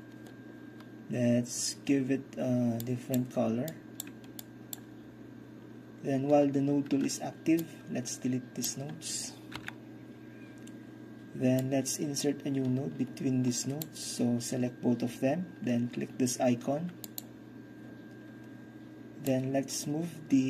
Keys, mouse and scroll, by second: 2.9 click, 3.8-4.1 drag, 4.5-4.8 drag, 7.6-9.6 drag, 9.6 Delete, 11.6-15.8 drag, 17.1-18.2 drag, 19.4-20.4 drag.